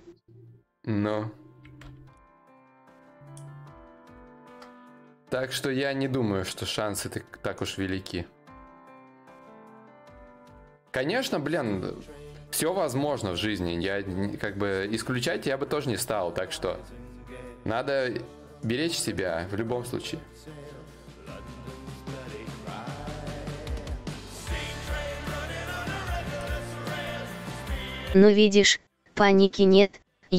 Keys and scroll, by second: 21.6 d, 21.8 d, 22.2 d, 22.7 d, 24.2 d.